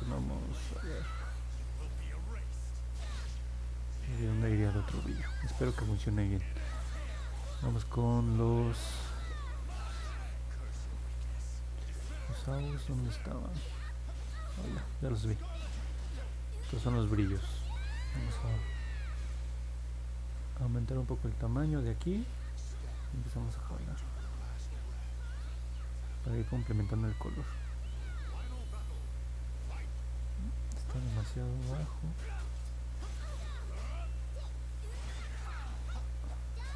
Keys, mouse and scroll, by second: 9.6 click, 14.4 click, 23.9 click, 24.6 click, 24.9 click, 25.2 click, 25.5 click, 25.8 click, 26.0 click, 26.3 click, 26.6 click, 26.9 click, 27.1 click, 27.4 click, 27.7 click, 28.0 click, 28.3 click, 28.6 click, 28.9 click, 29.2 click, 29.5 click, 29.7 click.